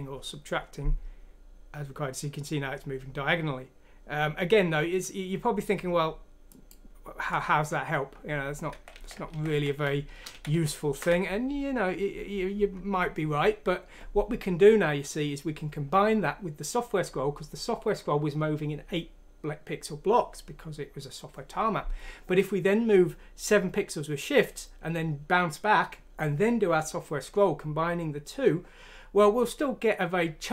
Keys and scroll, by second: 8.7 ctrl+z, 8.9 ctrl+z, 9.1 ctrl+z, 9.3 ctrl+z, 9.4 ctrl+z, 9.7 ctrl+z, 10.3 ctrl+z, 10.5 ctrl+z.